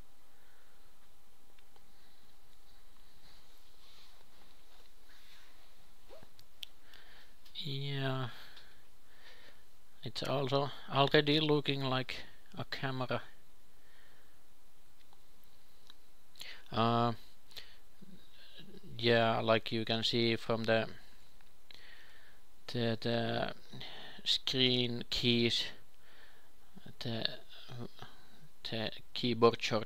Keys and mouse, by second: 0.0-2.9 typing, 4.2 e, 5.8 g, 8.9 e, 9.8 s, 12.0 Tab, 12.7 ctrl+shift+KP_2, 12.9 ctrl+shift+KP_3, 13.4-14.4 drag, 14.4 ctrl+shift+KP_2, 14.7 ctrl+shift+KP_3, 15.1 Tab, 16.1 KP_2, 16.6-17.6 drag, 21.0 ctrl+b, 25.2-27.2 drag, 26.7 ctrl+b.